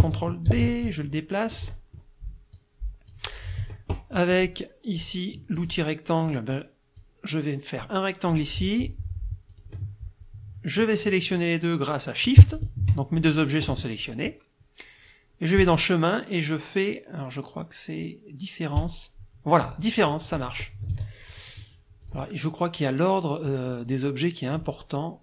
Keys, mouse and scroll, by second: 0.5 ctrl+d, 0.9-2.2 ctrl+drag, 2.6 click, 5.6 click, 7.0-8.5 drag, 9.5 click, 12.6 shift+click, 15.6 click, 18.8 click, 20.9 ctrl+z, 21.3 ctrl+click, 22.0 click, 23.5 click, 24.6 click.